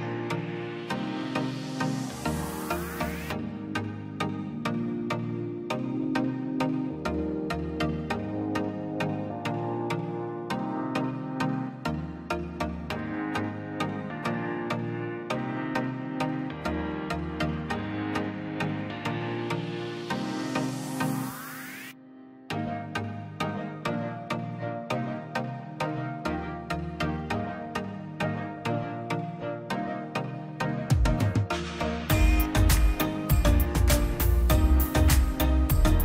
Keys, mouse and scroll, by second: 0.4 ctrl+z, 0.8 click, 2.3 ctrl+z, 2.9 click, 3.5 Escape, 4.4 click, 7.0 ctrl+z, 7.3-9.4 drag, 9.4 click, 11.1-12.3 drag, 13.9 click, 16.8 scroll up 1, 17.2 click, 21.0 scroll down 1, 21.5 click, 22.7 click, 23.8 ctrl+z, 24.7 click, 24.9 scroll up 1, 25.3-27.7 drag, 27.7 middle click, 28.6 click, 30.5 Delete, 30.9 click, 32.2-32.6 scroll up 1, 32.6 click, 33.3 middle click, 34.2 scroll up 1, 34.6 click, 35.2-35.6 scroll down 1, 35.8 click.